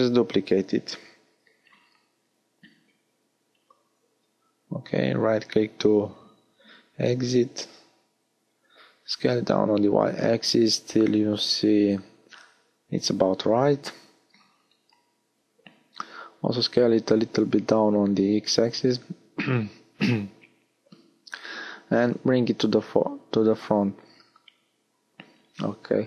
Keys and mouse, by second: 1.0 middle click, 1.0 shift+d, 1.6-2.6 drag, 6.0 s, 11.3 s, 13.2 middle click, 15.7-17.8 right drag, 17.8-19.3 middle drag, 21.6-24.1 right drag, 24.1-26.0 middle drag.